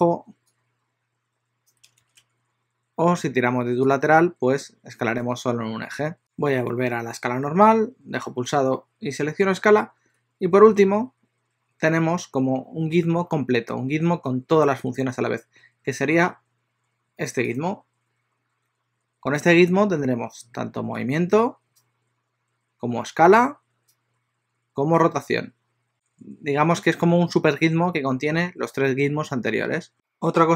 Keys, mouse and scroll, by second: 0.5 click, 4.0 click, 10.8 alt+s, 17.6 click, 21.2 click, 23.3 click, 25.2 click, 29.9 n.